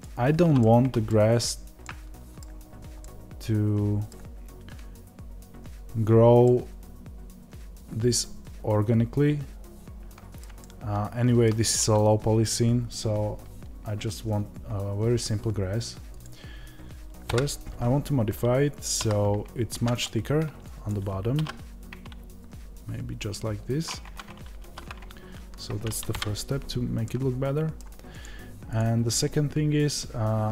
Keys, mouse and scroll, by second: 0.5-16.1 middle drag, 1.2 scroll up 1, 2.5 scroll down 1, 16.1-17.2 drag, 17.2 KP_Divide, 19.6 Tab, 20.8 click, 26.0 KP_Divide, 27.0-28.2 middle drag, 28.2 click.